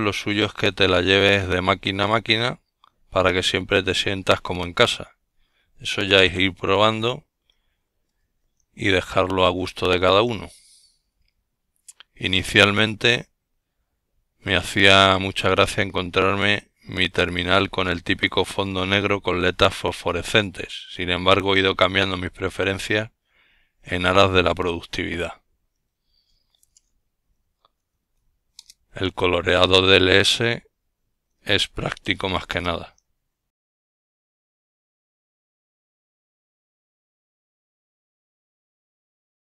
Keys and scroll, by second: 8.3-9.3 typing, 12.2-13.2 typing, 15.7 typing, 21.1-23.2 typing, 23.0 Return.